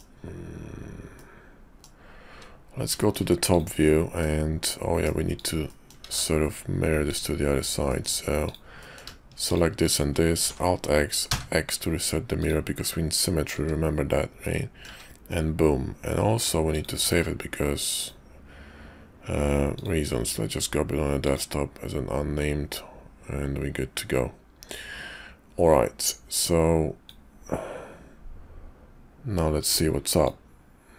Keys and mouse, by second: 1.1 middle click, 2.9 shift+middle click, 3.4 click, 4.1 middle click, 5.3 click, 5.6 middle click, 6.0 alt+x, 7.1 click, 7.9 middle click, 8.4 click, 8.8 middle click, 9.5 shift+click, 10.3 alt+x, 12.4 click, 12.8 middle click, 13.6 `, 14.4 middle click, 14.9 `, 16.7-18.1 drag.